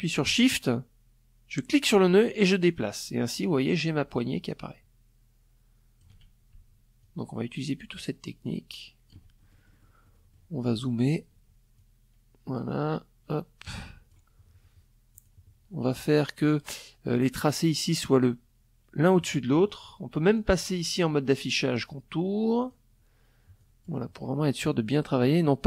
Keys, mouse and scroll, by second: 0.2-4.7 shift+drag, 5.6-7.8 shift+drag, 7.9 shift+click, 8.6 shift+click, 10.3-12.8 shift+drag, 13.7 click, 18.8 click, 21.1 click, 22.1 click, 23.7 click.